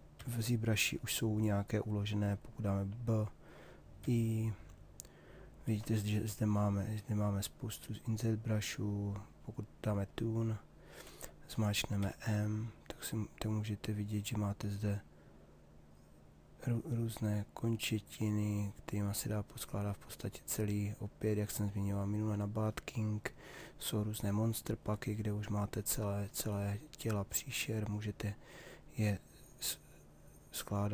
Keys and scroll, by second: 4.0 i, 11.5 m.